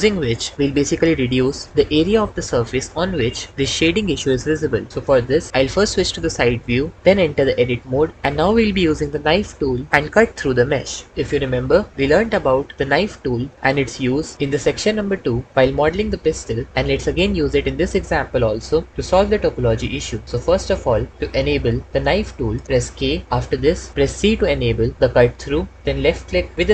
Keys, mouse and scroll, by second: 5.5 KP_3, 7.7 Tab, 22.8 k, 25.1 c.